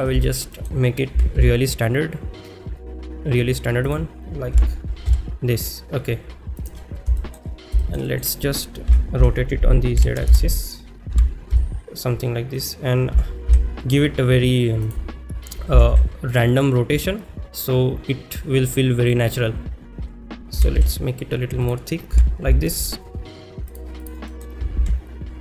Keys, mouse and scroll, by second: 0.2 shift+middle drag, 3.9 click, 3.9 z, 6.6 g, 6.6 z, 7.3 shift+middle click, 7.8 shift+middle drag, 8.1 middle click, 10.3 Return, 10.3 0, 12.6 click, 12.6 r, 12.6 z, 14.9 g, 14.9 x, 17.0 click, 17.0 y, 17.3 middle drag, 18.8-19.2 middle drag, 21.6 s, 21.6 z, 23.7 shift+click, 23.7 g, 23.7 z, 24.3 middle click.